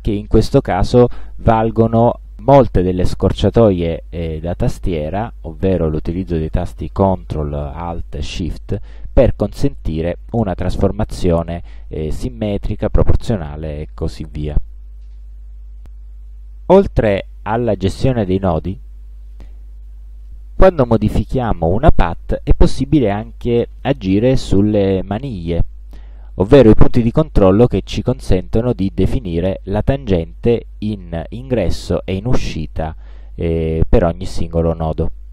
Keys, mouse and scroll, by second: 10.6-12.7 shift+drag, 18.7-20.1 drag, 28.0-30.7 drag.